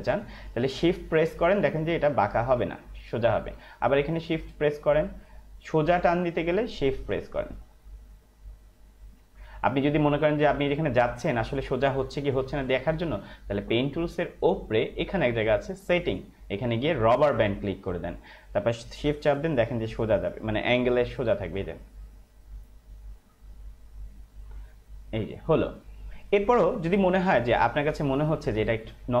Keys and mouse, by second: 2.4 shift+click, 4.4 shift+click, 16.0 click, 22.0 shift+click, 27.7 space, 27.9 click, 28.2 space.